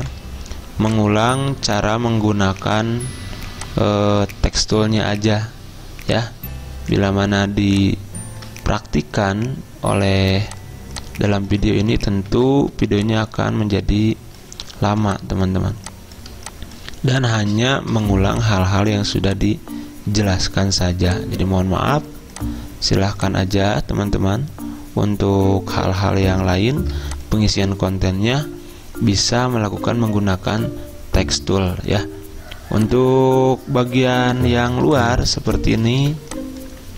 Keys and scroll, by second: 0.0 v, 12.4 ctrl+g, 14.9 z, 18.7 typing, 34.8-36.0 typing.